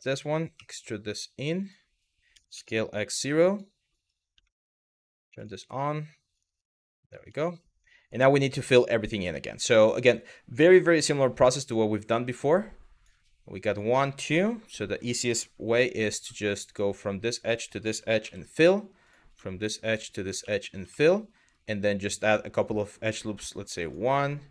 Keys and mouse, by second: 0.2 e, 1.2 click, 3.1 click, 4.1 shift+middle click, 5.0 click, 5.9 g, 6.3 click, 7.1 middle click, 8.2 shift+middle click, 8.9 shift+middle click, 10.3 click, 11.1 click, 13.3 click, 15.8 w, 17.1 shift+click, 17.9 f, 18.7 click, 20.0 f, 20.5 shift+middle click, 23.0 click, 23.9 click.